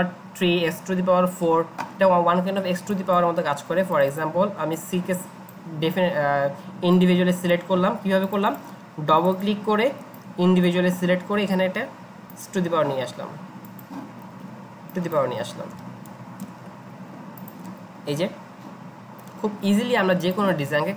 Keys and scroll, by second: 15.7 0, 16.4 Return.